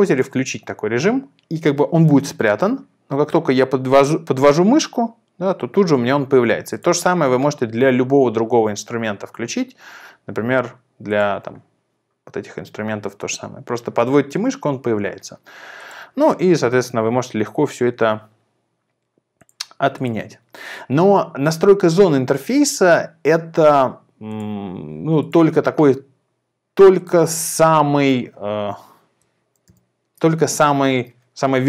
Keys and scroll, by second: 29.7 super+b, 30.9 super+t.